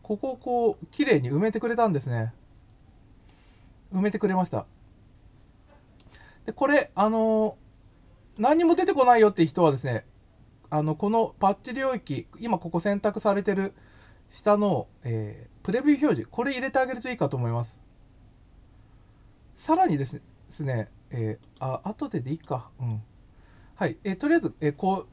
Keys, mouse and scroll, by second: 0.2-0.6 scroll down 4, 1.7 scroll up 1, 3.3-5.9 middle drag, 8.3 click, 15.6 click, 21.3 click, 22.2 click.